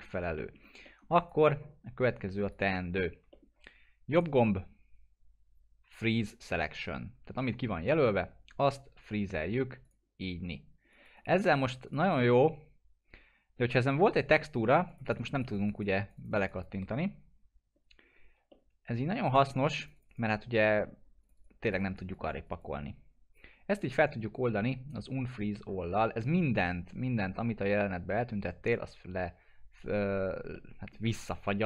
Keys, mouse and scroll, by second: 0.0-0.4 scroll up 1, 0.4 middle click, 0.5 Delete, 0.8 middle click, 1.2 click, 2.7 scroll up 1, 2.9 alt+middle click, 4.1 right click, 9.8 click, 12.1-14.6 alt+middle drag, 14.9 click, 17.7-18.4 scroll up 1, 18.5-19.7 alt+middle drag, 19.8 click, 23.7 right click, 28.6 click, 30.5-31.2 alt+middle drag.